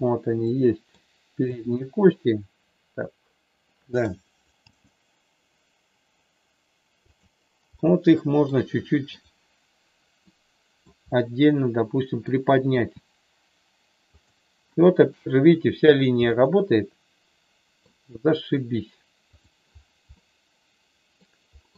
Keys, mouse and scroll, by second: 1.5-4.0 middle drag, 4.7 g, 7.9 middle click, 10.6 middle click, 11.0-12.2 middle drag, 12.7 r, 14.1 click, 16.2-17.9 middle drag, 19.4 click, 20.1-21.1 middle drag.